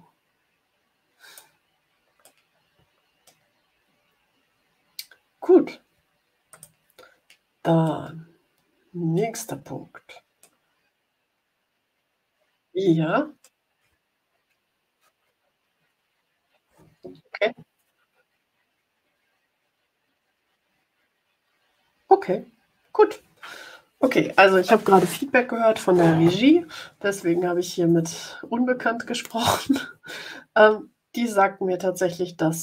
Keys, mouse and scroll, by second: 2.1-3.4 drag, 6.4 click, 7.8-9.3 middle drag, 10.3-13.5 drag.